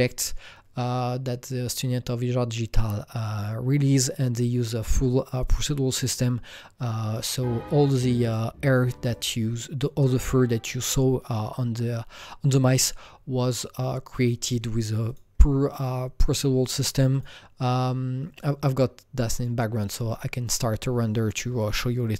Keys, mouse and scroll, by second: 3.1 Return, 3.1 Down, 3.1 click, 6.0 Return, 6.0 click, 7.8 click, 8.2 click, 8.9 click, 9.1-13.4 drag, 15.2-17.1 drag, 17.1 click.